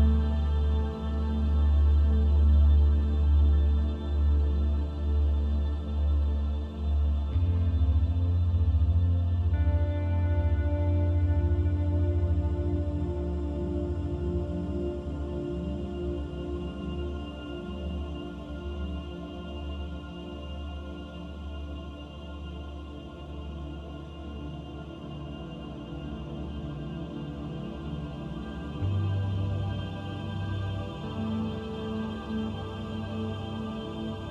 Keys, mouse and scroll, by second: 0.7 scroll down 2, 1.7 click, 5.9 click, 7.0-8.0 scroll down 2, 8.0 click, 12.4 click, 17.7 click, 28.3 click, 30.5 click.